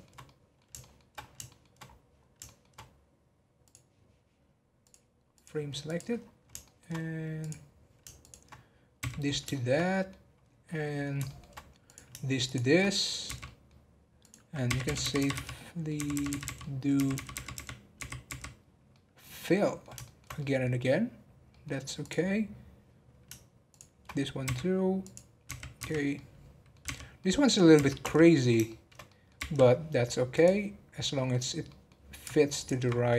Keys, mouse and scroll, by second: 1.1-1.5 scroll up 1, 1.5 shift+middle click, 1.8-2.2 scroll up 1, 2.2 scroll down 2, 2.4 shift+middle click, 2.7 scroll up 1, 3.6 click, 4.8-6.2 drag, 6.2-6.6 scroll down 7, 6.6 shift+middle click, 6.9-7.4 scroll down 1, 7.4 click, 8.2 shift+click, 9.0 f, 9.2 scroll down 5, 9.5 shift+middle click, 10.4 scroll up 1, 10.6-11.8 middle drag, 11.8 click, 12.4 shift+click, 13.3 f, 13.4 middle click, 14.2 click, 15.5 middle click, 15.9 f, 16.6 middle click, 16.9 f, 18.6 scroll down 1, 18.9 middle click, 19.2-19.6 scroll up 4, 19.6-22.0 middle drag, 22.0 click, 23.6 shift+click, 24.4 f, 25.0 click, 26.1 middle click, 26.8 f, 27.1 middle click, 27.7 f, 28.7 shift+middle click, 29.4 f, 30.3 click, 30.7 scroll down 1, 31.0 middle click, 31.9-32.5 scroll up 2, 32.5 alt+click.